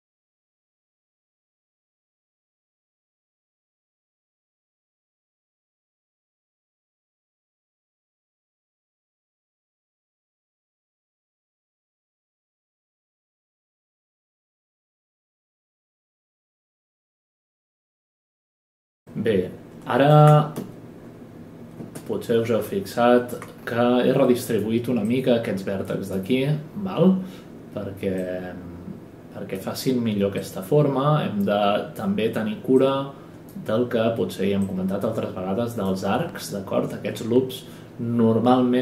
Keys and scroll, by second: 1.7-2.7 typing, 4.4-6.2 typing, 5.7 ctrl+space, 15.1 space, 15.4 space, 15.6 space, 15.8 space, 20.5 space, 21.8 typing.